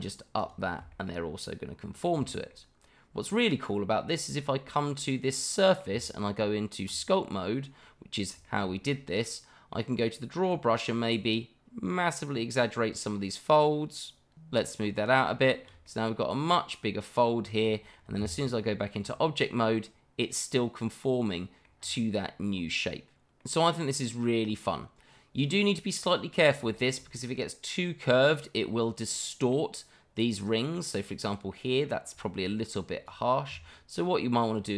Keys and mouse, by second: 0.4 alt+click, 0.9-2.0 middle drag, 2.3 shift+middle drag, 3.2 click, 4.4-5.8 middle drag, 6.5 Tab, 7.9 middle click, 8.4 shift+middle click, 9.2 middle click, 10.5 click, 12.8 middle click, 14.6 shift+click, 15.3 shift+middle click, 16.2 middle click, 16.6 shift+middle click, 16.8 middle click, 17.8 middle click, 18.2 Tab, 19.6-21.0 middle drag, 21.3-22.3 middle drag, 22.5 shift+middle drag, 23.4-26.1 middle drag, 26.7 shift+middle drag, 27.2-28.3 middle drag, 29.1-29.5 middle drag, 30.5 middle drag, 31.5-31.9 middle drag, 32.2 shift+middle drag, 32.5-32.9 middle drag, 33.0 click, 33.5 Tab.